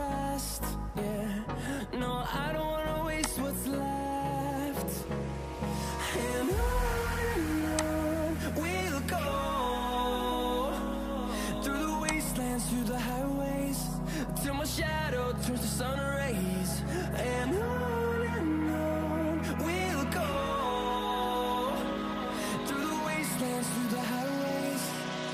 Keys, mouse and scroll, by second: 6.2 ctrl+t, 10.2 Return, 17.6 ctrl+1, 18.0 ctrl+1, 18.2 ctrl+1, 23.0 ctrl+-, 23.6 ctrl+-, 25.0 ctrl+-.